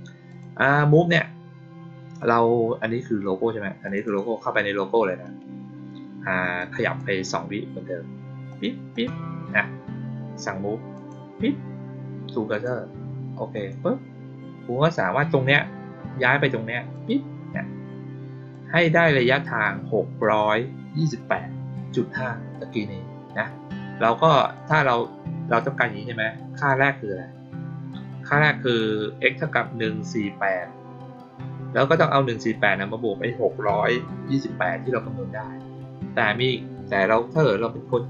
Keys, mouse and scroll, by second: 0.2 click, 3.8 click, 4.0 click, 6.5 click, 8.4 click, 8.8 click, 10.9 click, 12.4 click, 13.5 click, 16.9-18.4 drag, 24.5 click, 26.5 click.